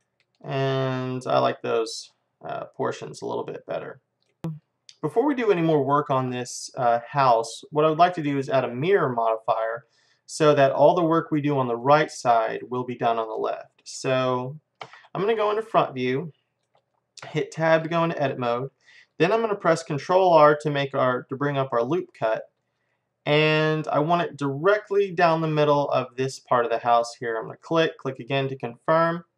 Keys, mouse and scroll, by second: 6.0-8.5 middle drag, 8.8-13.7 middle drag, 14.9 KP_1, 15.8-17.8 middle drag, 17.4 Tab, 18.0-20.3 middle drag, 20.3 ctrl+r.